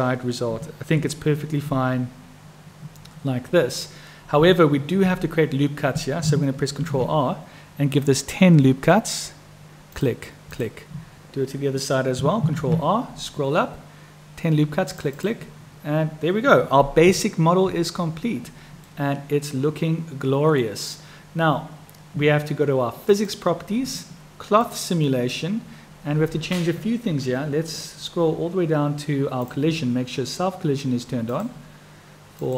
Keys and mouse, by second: 1.0 Tab, 4.4 Tab, 6.8 ctrl+r, 12.6 ctrl+r, 17.1 Tab, 18.9-20.6 drag, 23.1 click, 24.6 click, 29.4 click, 32.2 click.